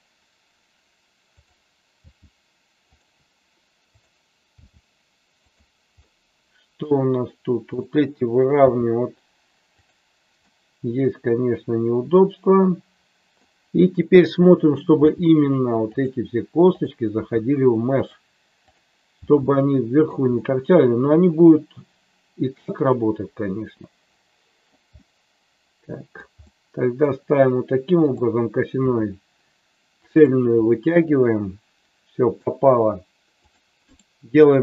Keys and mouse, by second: 1.3 click, 1.9 g, 4.5 g, 5.3 click, 5.9 middle click, 7.7 click, 8.5 g, 9.8 click, 10.4-13.4 middle drag, 14.1 click, 15.0 g, 16.7 click, 17.2 g, 18.7 click, 19.1 g, 19.9 click, 20.3-24.7 middle drag, 24.9-26.2 middle drag, 28.8 e, 29.9 click, 30.7-32.3 middle drag, 33.4 click.